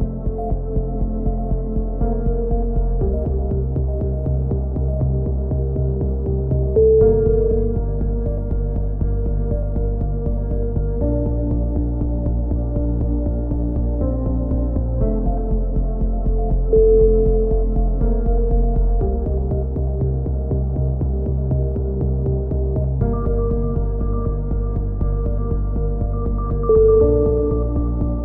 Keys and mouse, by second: 1.0 z, 1.7-2.8 drag, 3.6 click, 4.6 right click, 5.5-9.4 right drag, 9.0 x, 10.2-12.5 right drag, 12.1 e, 12.7 click, 14.0-15.0 drag, 15.0 middle click, 15.2-16.3 drag, 18.5 right click, 18.7 middle click, 18.9 right click, 19.8 click, 20.7 right click, 21.3-22.5 right drag, 22.6 right click, 23.3 right click, 23.9 click, 24.1 middle click, 24.6 right click, 25.0 middle click, 25.5-27.0 drag, 27.0 middle click, 27.2 click, 27.4 right click, 27.6 middle click, 27.9 click.